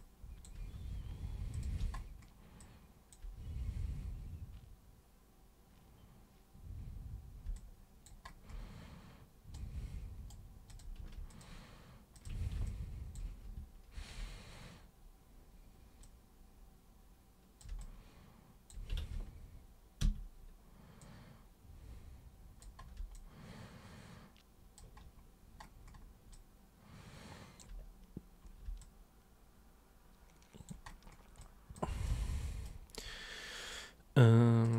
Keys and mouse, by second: 1.5 super+click, 2.6-3.1 alt+super+drag, 7.6 alt+super+click, 9.6 super+right click, 10.7 super+click, 11.3 ctrl+shift+super+click, 12.2 ctrl+shift+super+click, 12.7-13.2 alt+super+drag, 13.9 ctrl+super+e, 16.0-17.6 super+drag, 17.8-18.7 alt+super+drag, 19.0 ctrl+super+z, 20.0 super+w, 21.0-22.6 super+drag, 23.2-24.7 alt+super+drag, 26.3-27.6 alt+super+drag, 28.8-30.7 alt+super+drag, 31.4 alt+super+click, 32.1 super+right click, 34.6 super+click.